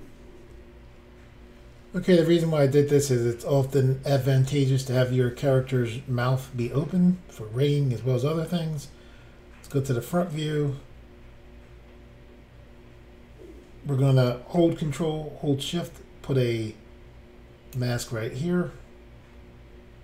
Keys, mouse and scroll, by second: 6.8 middle click, 9.7 click, 10.1 scroll up 4.